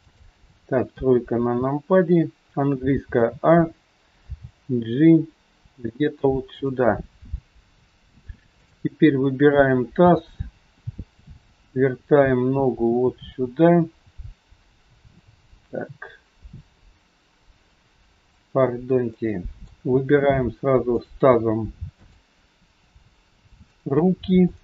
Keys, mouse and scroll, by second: 0.9 KP_3, 2.9 a, 9.0 click, 10.0 g, 19.7 middle click, 19.7-20.5 scroll up 3, 20.9 shift+click, 21.9 shift+click, 24.4 middle click, 24.4 scroll up 1.